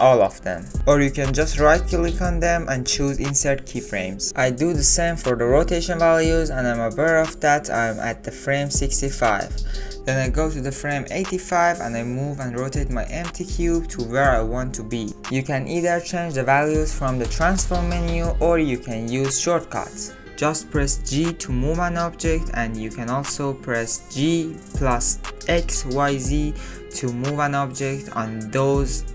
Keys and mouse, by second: 2.0 ctrl+z, 2.5-5.0 drag, 6.5 i, 11.7 click, 13.1 Left, 14.4 click, 15.9 shift+click, 16.7-18.0 drag, 18.8 ctrl+z, 21.2 ctrl+z, 22.4 g.